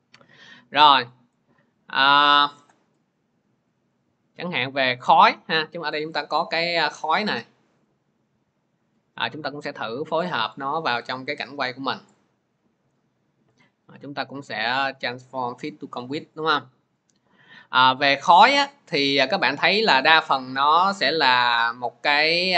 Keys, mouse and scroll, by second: 2.0 click, 3.6 click, 5.5 click, 9.3 click, 11.5 click, 11.9 click, 14.2 right click, 14.3 click.